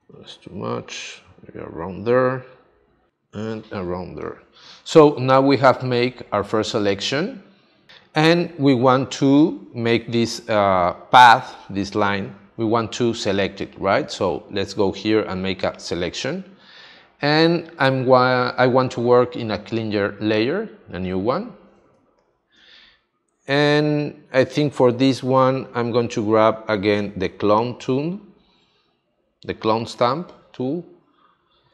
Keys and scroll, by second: 0.0 super+z, 4.0 space, 21.9 space.